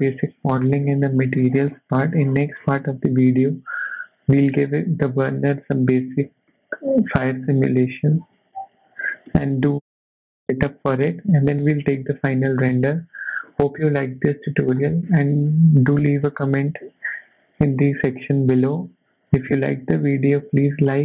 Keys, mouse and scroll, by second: 6.5 middle click, 9.1 scroll up 1, 9.3 shift+middle click, 10.0 middle click, 11.0 shift+middle click, 11.5-12.1 scroll down 5, 12.3 shift+middle click, 13.5-14.7 scroll up 5, 15.0 shift+middle click, 15.5 scroll down 2, 16.2 scroll up 1, 16.3 middle click, 19.7 middle click, 20.9 scroll down 2.